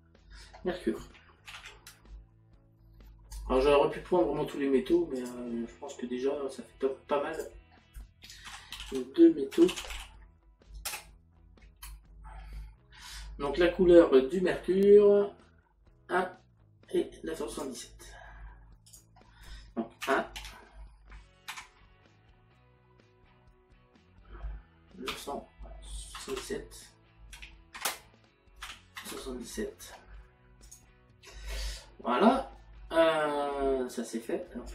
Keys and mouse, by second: 5.2 click, 7.4 click, 8.7 shift+m, 17.5 click, 18.9 click, 20.0 KP_1, 21.5 KP_Decimal, 25.1 KP_9, 27.8 KP_Decimal, 30.7 click.